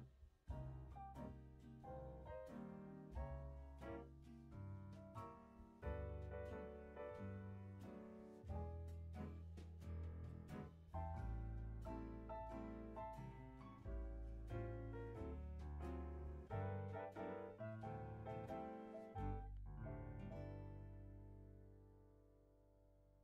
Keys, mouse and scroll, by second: 0.1-1.4 scroll up 2, 1.4-2.9 scroll up 2, 2.9-4.6 scroll down 2, 4.6-5.2 scroll down 1, 5.2-7.0 scroll up 4, 7.0 click, 7.9 click, 8.3 click, 9.5 click, 9.9-10.3 scroll down 2, 10.5 middle click, 10.8-11.1 scroll up 5, 11.1 middle click, 11.4-12.5 scroll up 9, 12.5 click, 15.9-17.3 scroll down 2, 17.3 middle click, 17.8-19.4 scroll up 1, 19.4-23.2 drag.